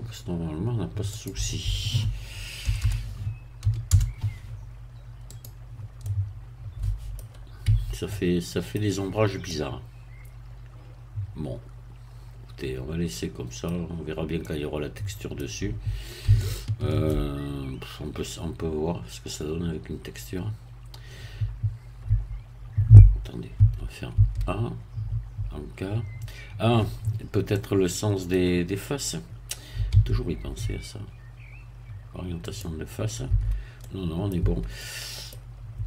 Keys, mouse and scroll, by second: 1.1 click, 2.7 BackSpace, 3.6 3, 3.9 0, 5.3 click, 6.0-7.3 middle drag, 7.7 Tab, 8.1-9.3 middle drag, 9.5-13.9 middle drag, 14.4-16.3 middle drag, 16.3-17.5 shift+middle drag, 22.1 Tab, 23.5 a, 27.5 middle click, 29.9 q, 32.5 click, 33.3 Tab, 33.8 middle click, 34.4 Tab, 34.7 middle click, 34.8 scroll down 1.